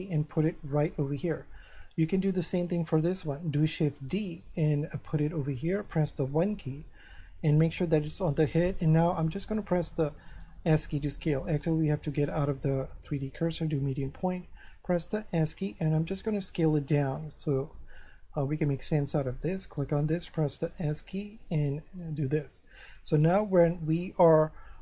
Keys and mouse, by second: 0.7 click, 1.2 shift+middle click, 3.7 shift+d, 5.3 click, 6.0 1, 9.2 s, 12.1 click, 13.6 click, 15.1 s, 17.6 click, 18.1 shift+middle click, 19.6 right click, 20.8 s, 22.2 click.